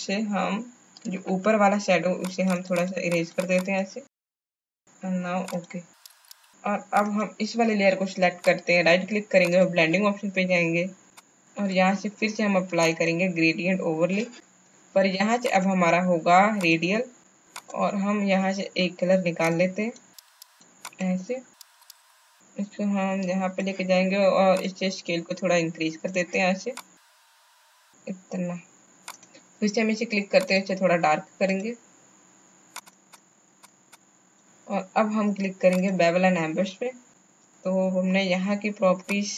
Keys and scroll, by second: 4.6 space, 6.3 space.